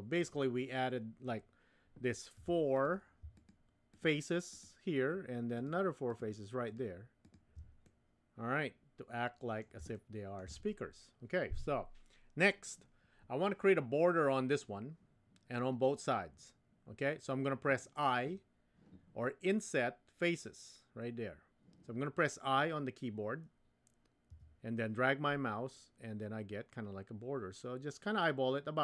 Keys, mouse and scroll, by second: 2.4 3, 3.3 shift+click, 3.9 shift+click, 4.5 shift+click, 6.1 shift+click, 6.7 shift+click, 7.2 shift+click, 7.9-9.6 middle drag, 9.9 shift+middle click, 24.3 i.